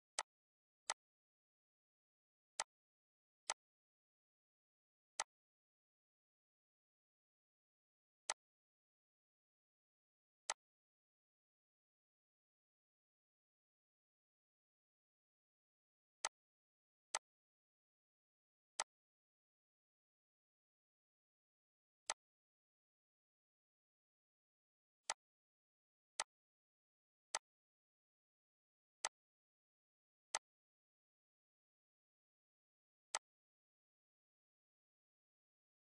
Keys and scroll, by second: 14.6 ctrl+d, 25.3 2, 25.5 Return.